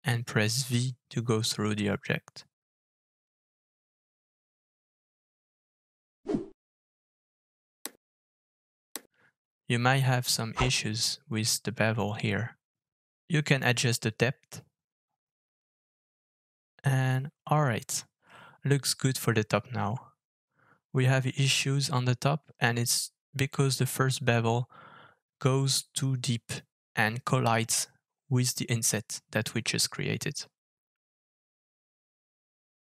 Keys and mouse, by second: 7.4-21.7 middle drag, 22.2-26.2 middle drag, 26.4 shift+middle drag, 26.7 middle drag, 27.1 shift+middle drag, 28.0 shift+middle drag, 30.3-31.1 drag, 31.2-32.1 middle drag, 32.7-32.8 middle drag.